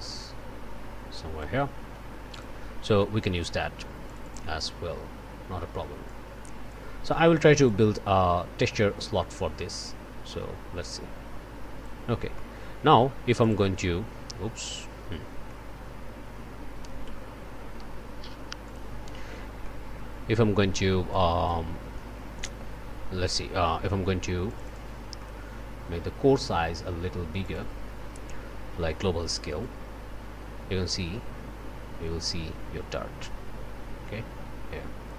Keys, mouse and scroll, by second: 2.3 click, 3.0 click, 4.0 click, 6.0 click, 7.6-12.0 drag, 12.3 click, 13.4 click, 15.1 scroll down 1, 15.4-16.7 drag, 18.6 click, 19.6 click, 20.3 scroll up 1, 21.1 click, 23.6-24.0 scroll up 1, 24.7 click, 25.6 click, 29.6-35.1 drag.